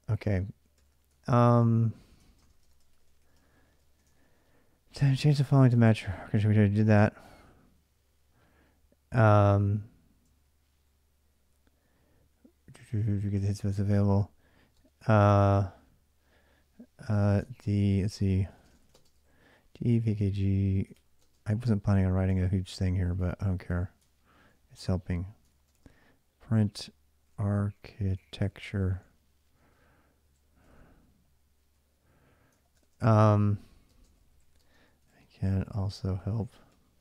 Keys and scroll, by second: 0.0-7.3 typing, 0.9 ctrl+[, 0.9 ctrl+j, 10.0 ctrl+[, 10.2-15.0 typing, 16.7-21.2 typing, 22.5-29.0 typing, 30.0-37.0 typing.